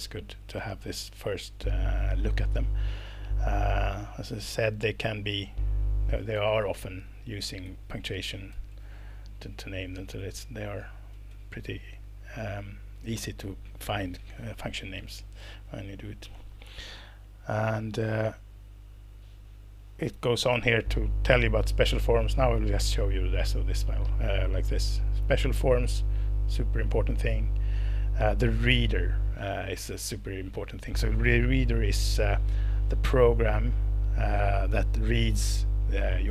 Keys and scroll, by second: 6.6 Left, 6.9 Left, 7.1 Right, 7.3 Right, 7.7 Left, 7.9 Right, 8.4 Right, 8.5 Left, 8.9 Right, 9.9 Down, 10.2 Down, 10.4 Down, 11.1 Down, 11.3 Down.